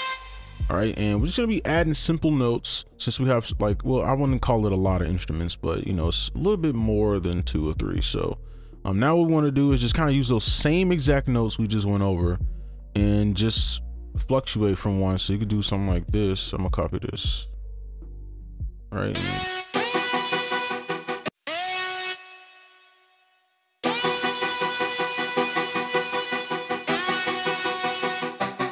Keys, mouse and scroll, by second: 5.1 right click, 9.9-10.5 scroll up 1, 15.0 ctrl+click, 16.0 ctrl+c, 17.6 right click, 19.7 space, 21.3 space, 23.8 space, 24.2 right click, 25.0 ctrl+a, 25.3-26.0 alt+scroll down 7, 26.0 right click, 28.0 alt+click.